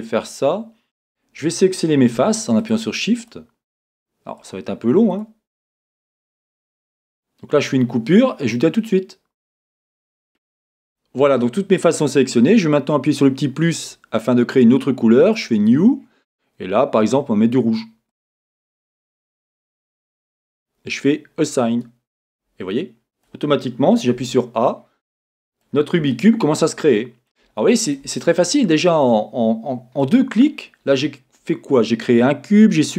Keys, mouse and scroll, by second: 0.7-1.1 scroll up 1, 1.1-13.7 drag, 13.8-21.2 drag, 21.5-22.7 drag, 22.7-32.9 middle drag, 28.2-29.1 scroll down 2, 30.4-31.1 scroll up 2, 31.1-32.9 scroll up 1.